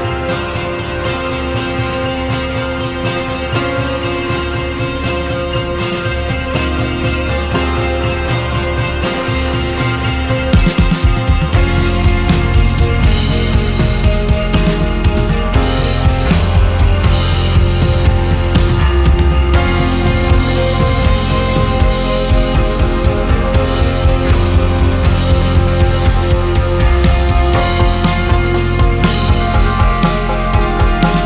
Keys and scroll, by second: 9.1 1, 17.3 Escape, 18.4 KP_2, 18.8 space, 19.7 space, 22.6 space, 24.2 2, 25.3 ctrl+z, 25.5 2, 29.8 Delete.